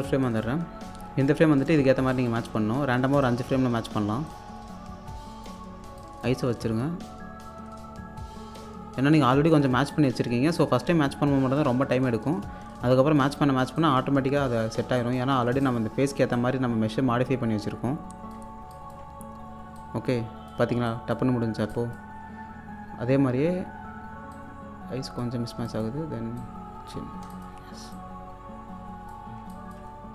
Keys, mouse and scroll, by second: 0.2-1.3 scroll up 1, 1.3 click, 2.0 click, 2.9 scroll up 1, 3.2 alt+click, 3.6-4.3 scroll up 1, 4.3-5.7 drag, 5.7 scroll down 1, 6.0 alt+click, 7.1-7.5 scroll down 1, 8.6-14.8 drag, 14.8 scroll down 1, 15.0 alt+click, 15.9-16.3 scroll up 1, 16.3-18.5 drag, 18.5 scroll down 1, 18.7 alt+click, 19.1 scroll up 1, 19.7 click, 20.7 scroll down 1, 20.9 alt+click, 21.4 scroll up 1, 21.7 alt+click, 22.3 scroll down 1, 23.4-24.2 scroll up 1, 24.3 click, 27.2 scroll down 1, 27.3 alt+click, 27.7-28.0 scroll up 1, 29.3 scroll down 1, 29.5 alt+click.